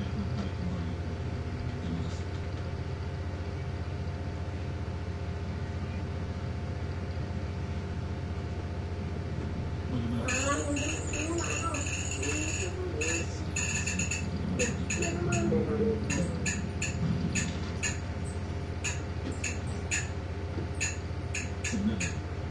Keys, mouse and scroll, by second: 1.8 ctrl+Up, 4.1-5.0 drag, 5.1-5.6 scroll up 1, 5.8-6.7 scroll down 2, 7.2-8.2 scroll up 4, 8.9-9.3 scroll down 2, 12.6 shift+F11, 14.0 click, 15.4 click, 17.3 click, 18.4 click, 19.7 click, 21.5-22.5 drag.